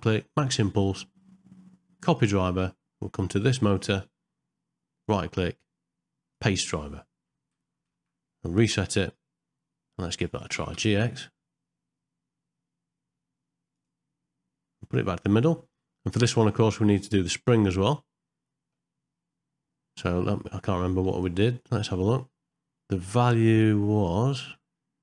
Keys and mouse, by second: 0.0-2.2 right drag, 3.7 click, 5.0-6.4 right drag, 8.0 shift+Left, 10.1 click, 10.5 g, 17.4 click, 21.1 click, 21.6 click.